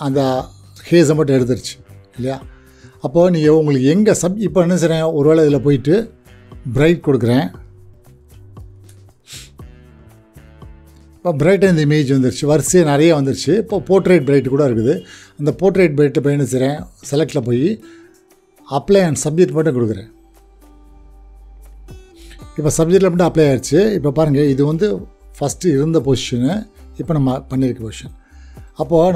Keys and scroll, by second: 25.7 shift+Delete.